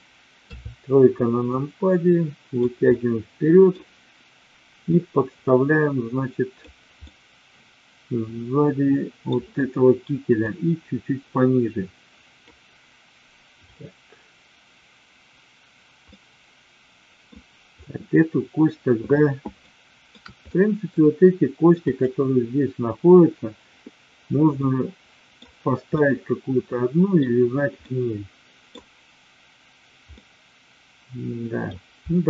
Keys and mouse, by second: 0.4 KP_3, 1.5-2.5 drag, 2.8 middle click, 4.9-6.6 drag, 7.0-9.3 middle drag, 10.4-12.4 drag, 13.6 click, 16.0-17.2 middle drag, 19.6 shift+middle click, 20.4 middle click, 24.6 middle click, 25.9-27.2 middle drag, 27.9 middle click, 30.2-31.6 middle drag.